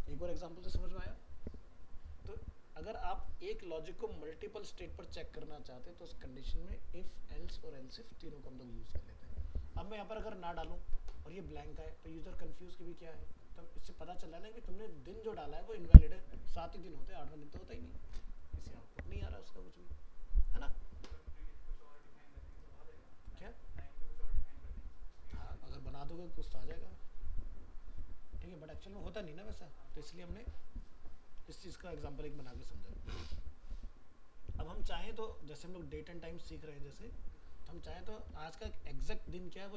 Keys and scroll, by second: 31.8 ctrl+s.